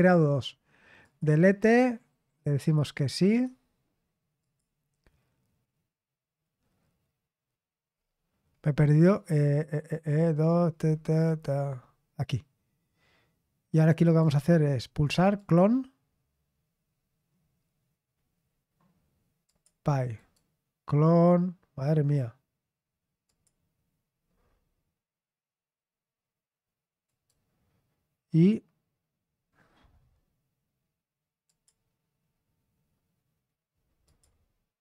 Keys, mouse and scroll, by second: 1.0 click, 2.6 click, 3.3 click, 4.4 click, 7.8-10.1 scroll down 1, 10.1-11.6 scroll down 4, 14.0-15.3 right drag, 15.3 click, 19.4 click, 20.1-21.2 right drag, 23.2 click, 27.0-31.4 right drag, 31.4 click, 34.0 click.